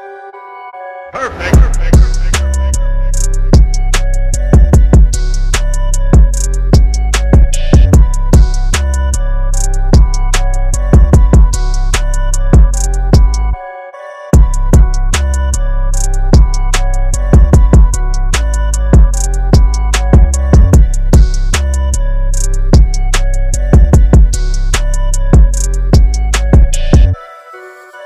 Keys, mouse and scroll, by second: 0.4 KP_4, 1.6 click, 4.2 click, 4.3-8.4 scroll up 1, 9.8 click, 11.9 click, 16.8 click, 19.1 click, 21.9 click, 24.0-25.4 scroll up 1.